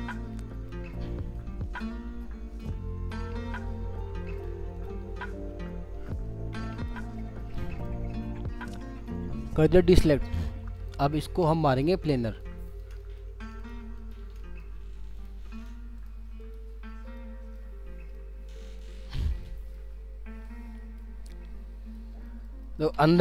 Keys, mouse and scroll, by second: 0.4 alt+middle click, 1.3 alt+click, 3.1 alt+scroll up 1, 3.7-4.3 alt+scroll up 1, 4.3 alt+click, 5.0-5.9 scroll down 3, 5.9 alt+scroll up 1, 6.7 alt+click, 7.1-7.5 alt+scroll down 1, 7.5 alt+scroll up 1, 7.6 alt+middle click, 8.3-9.1 scroll up 1, 9.1 middle click, 10.7 ctrl+click, 13.0 middle click, 14.4 middle click, 16.7-17.2 ctrl+scroll down 2, 17.2 alt+middle click, 18.1 alt+scroll up 1, 18.1 alt+middle click, 18.9 alt+scroll down 1, 19.0 scroll up 1, 19.4 alt+middle click, 19.9 scroll up 1, 20.4 alt+click, 22.2 middle click.